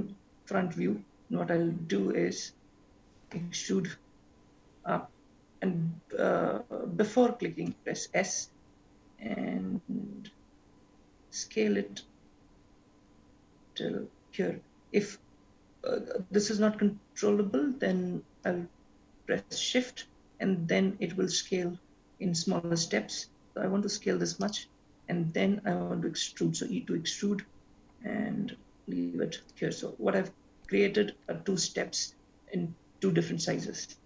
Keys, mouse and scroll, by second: 3.4 e, 25.4 e.